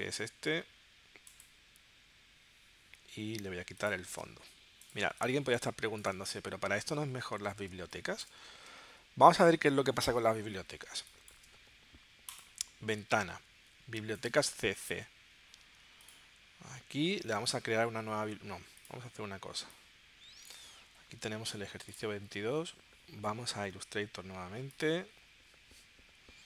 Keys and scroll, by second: 7.7 space, 8.7 w, 10.9 space.